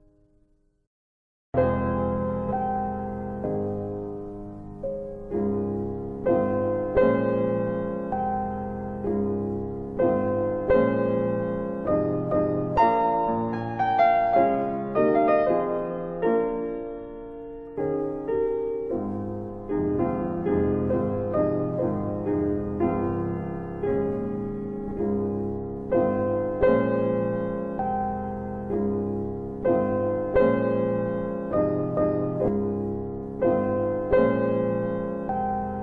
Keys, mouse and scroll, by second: 5.0 click, 5.4 click, 7.0 alt+click, 8.4 alt+click, 10.2 alt+click, 14.5 click, 18.0 click, 19.4 click, 21.8 click, 26.1 click, 27.1 alt+click, 32.9 alt+click.